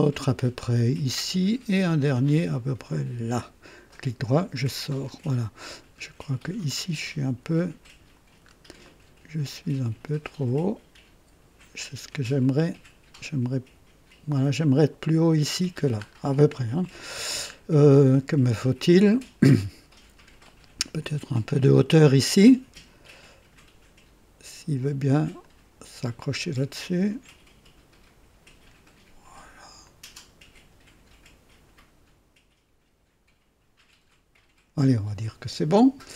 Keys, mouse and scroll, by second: 0.9 click, 2.8 click, 3.9 right click, 4.9 right click, 6.7 click, 8.4 scroll up 2, 8.8 right click, 10.4 click, 12.4-14.5 drag, 16.0 scroll down 2, 16.5 right click, 17.6 scroll up 2, 18.1-19.7 right drag, 21.5-23.2 drag, 25.4-28.8 drag, 29.8-34.7 drag.